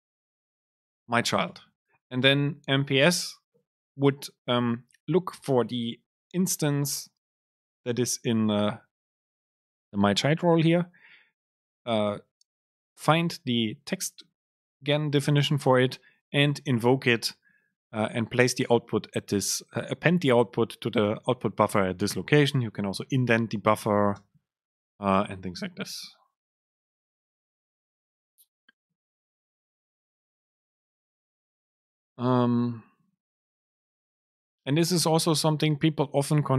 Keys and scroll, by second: 0.1 BackSpace, 0.2 super+space, 1.6 Up, 23.8 Return, 24.3 super+space, 27.4 Return, 28.6 Up, 28.9 Down, 29.2 End, 29.5 BackSpace.